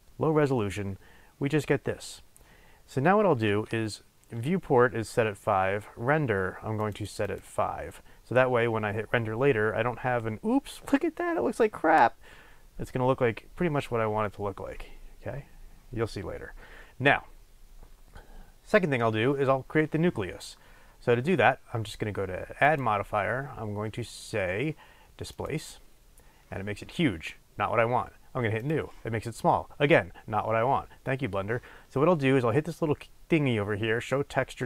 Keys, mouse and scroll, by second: 6.9-12.1 drag, 22.6-32.7 drag.